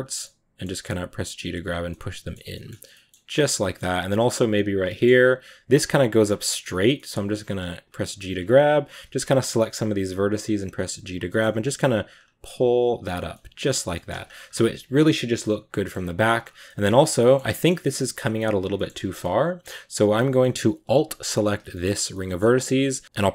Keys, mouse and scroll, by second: 0.1 middle click, 1.0 right click, 1.1 g, 1.8 middle click, 2.3 scroll down 1, 2.4-4.5 middle drag, 4.5 right click, 4.7 middle click, 5.2 g, 6.8 middle click, 7.0 g, 8.0 right click, 8.2 g, 8.7 right click, 8.9 g, 9.2 scroll up 3, 9.7 right click, 9.9 g, 10.9 right click, 11.2 middle click, 11.5 right click, 11.5 g, 13.0 scroll down 1, 13.2 middle click, 13.7 scroll down 1, 13.8 middle click, 14.1 scroll up 2, 14.3-15.3 scroll down 4, 15.3-15.8 middle drag, 15.8-16.5 scroll up 4, 15.9 Tab, 16.5-17.5 middle drag, 17.5 scroll down 1, 17.7-19.9 middle drag, 19.9-20.3 scroll up 3, 20.3-21.3 middle drag, 21.3 alt+right click, 21.9 middle click, 22.6-23.0 scroll down 1, 23.0 s.